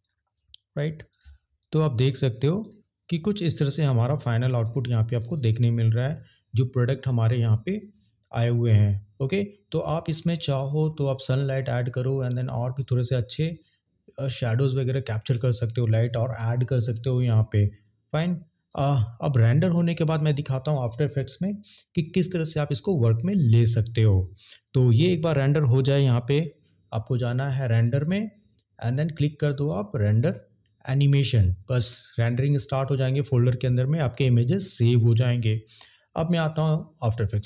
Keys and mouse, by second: 13.5 click.